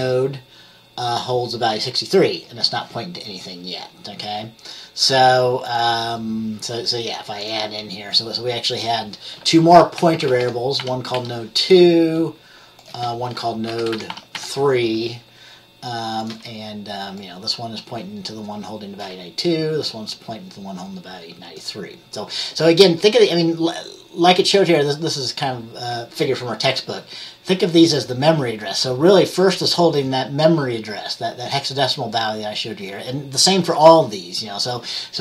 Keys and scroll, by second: 1.9 F10, 2.5 F10, 9.9-11.7 typing, 13.6-15.0 typing.